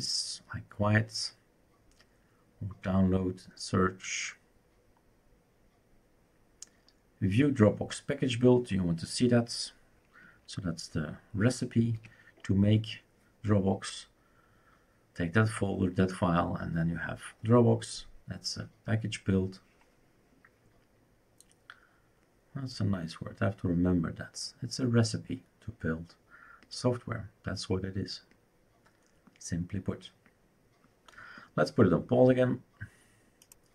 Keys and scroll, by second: 11.9 typing.